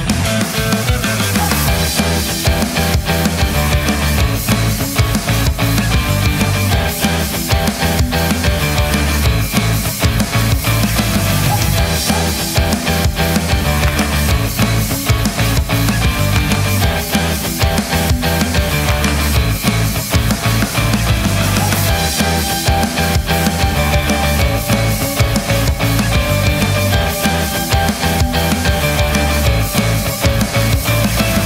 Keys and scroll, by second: 15.2 Return.